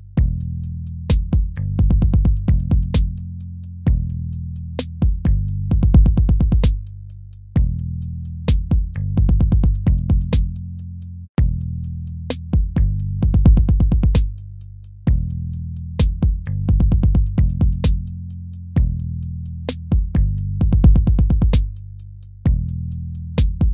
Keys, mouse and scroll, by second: 7.1 ctrl+z.